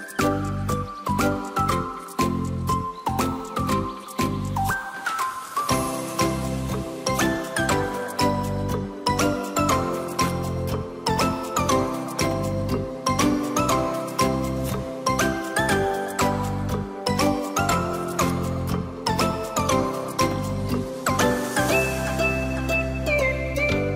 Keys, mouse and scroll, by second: 0.9 drag, 1.2 click, 2.7-7.6 drag, 8.9 click, 10.4 click, 11.8-15.2 drag, 15.4-18.0 drag, 18.6 click, 19.8-20.2 scroll up 2, 20.2-22.7 middle drag, 23.1 click.